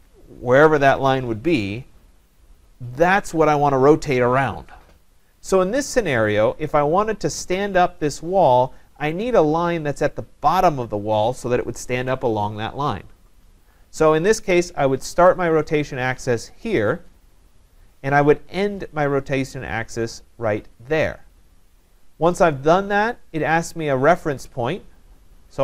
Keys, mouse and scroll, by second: 16.7 click, 17.2 scroll, 21.1 click, 21.1-21.7 scroll up 2, 21.8 scroll.